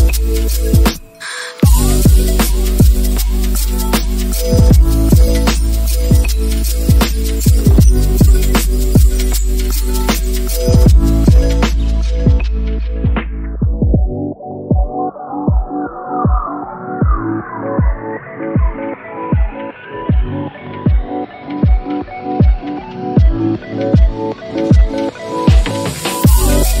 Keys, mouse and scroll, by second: 0.1 right click, 0.6 s, 1.3 click, 1.4 click, 3.8 scroll down 3, 4.0 click, 4.8 click, 5.0 shift+middle click, 7.9 middle click, 8.1 click, 9.1 right click, 10.2 click, 18.5 click, 21.3 click, 22.4 middle click, 22.6 middle click, 22.7 click, 23.5 middle click, 24.0 click, 24.1 middle click, 24.1 g, 24.4 click, 24.5 middle click, 25.1 click, 25.2 g, 25.6 middle click, 25.8 middle click, 25.9 scroll up 1, 26.1 middle click.